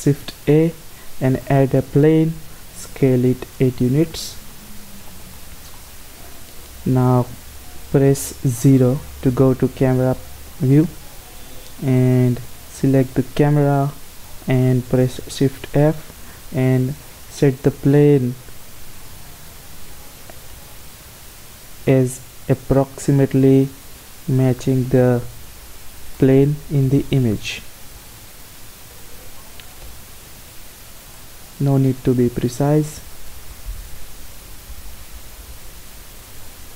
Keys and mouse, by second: 2.5 s, 4.9 click, 8.7 KP_0, 12.3-14.9 right drag, 15.1 shift+f, 19.9 g, 24.0 g, 27.3 shift+f, 29.6 g, 32.0 shift+f, 33.3 g.